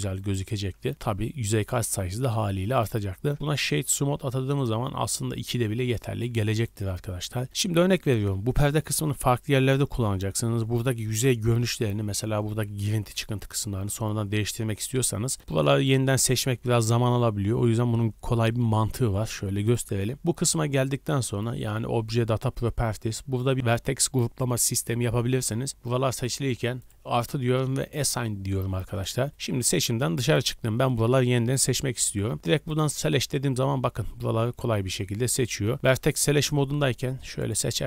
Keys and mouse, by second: 0.6-15.4 drag, 0.6 w, 6.1 Tab, 12.8 r, 19.8-26.9 drag, 29.4-35.9 middle drag, 35.9-37.8 drag, 35.9 1, 36.3 a, 36.4 a.